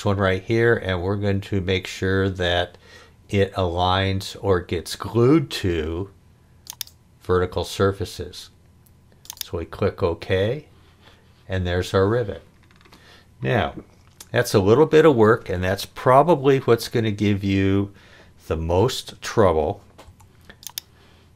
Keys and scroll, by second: 20.0 h.